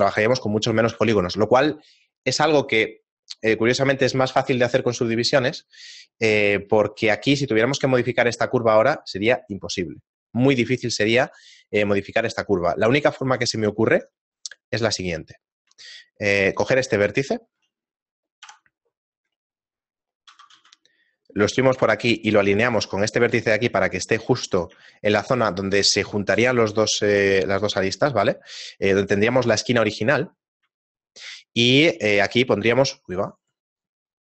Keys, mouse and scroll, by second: 1.0 Tab, 6.5 shift+middle click, 8.4 right click, 8.8 shift+middle click, 12.2 a, 12.6 shift+middle click, 13.8 ctrl+Tab, 14.8 right click, 16.0 shift+middle click, 17.0 middle click, 17.4 shift+middle click, 18.8 KP_7, 19.3-20.2 scroll up 7, 20.0 middle click, 20.3 e, 24.5 right click, 28.9 right click, 29.6 shift+middle click, 30.1 scroll down 2, 30.8 shift+middle click, 30.8 scroll down 4.